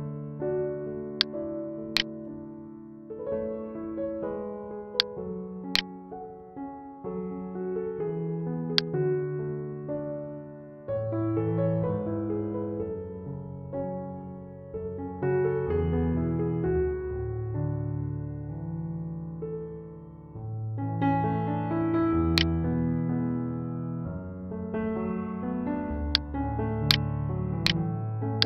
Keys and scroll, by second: 23.7 ctrl+=, 25.1 space.